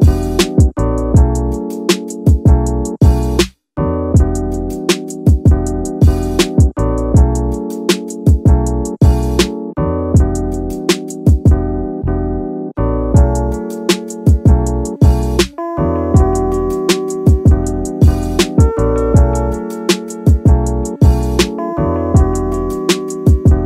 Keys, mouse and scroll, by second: 0.0 Tab, 1.2 ctrl+r, 1.7 ctrl+r, 1.8 ctrl+r, 4.5 click, 5.8 ctrl+r, 8.6 click, 8.9 middle click, 10.4 ctrl+r, 13.1 click, 13.4 middle click, 14.5 ctrl+r, 16.7 click, 17.0 scroll up 1, 17.1 middle click, 17.7 scroll up 1, 17.8 middle click, 18.5 scroll down 1, 18.7 middle click, 20.0 ctrl+r, 21.2 click, 22.1 ctrl+r, 23.4 click, 23.6 scroll up 1.